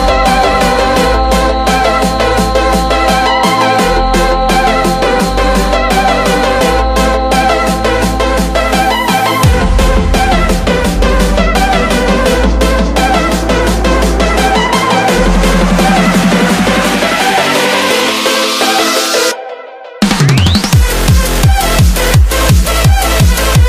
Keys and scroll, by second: 7.0 BackSpace.